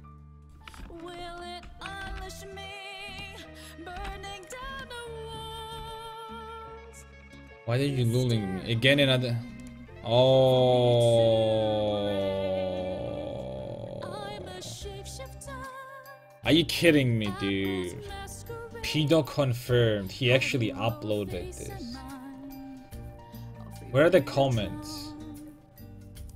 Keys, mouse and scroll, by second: 1.4 alt+o, 2.1 g, 3.4 middle click, 4.0 g, 4.6 a, 5.8 a.